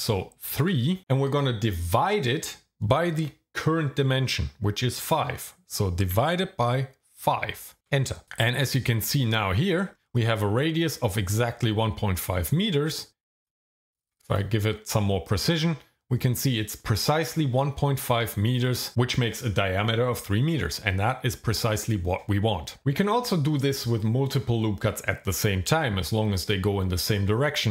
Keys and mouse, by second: 0.6 KP_3, 7.1 KP_5, 7.8 KP_Enter, 13.9 click, 14.3 click.